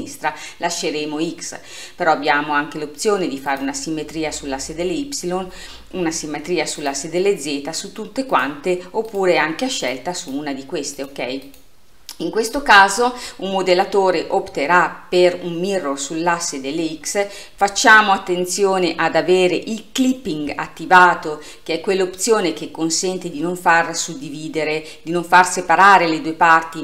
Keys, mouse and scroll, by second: 3.5 click, 6.8 click, 8.4 click, 9.1 click, 9.9 drag, 10.2 click, 11.0 click, 11.5 click, 20.0 click.